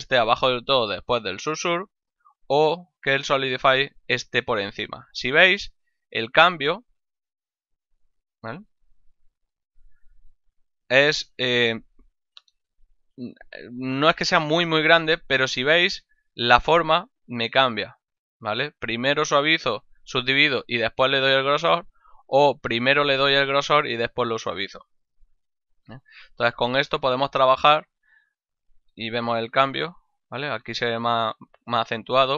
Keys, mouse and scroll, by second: 1.9 z, 3.5 click, 5.7 z, 7.7 click, 9.5 click, 10.7 z, 12.1 click, 13.2 click, 15.2 click, 17.6 click, 18.8 click, 22.6 click, 25.8 click, 29.2 click.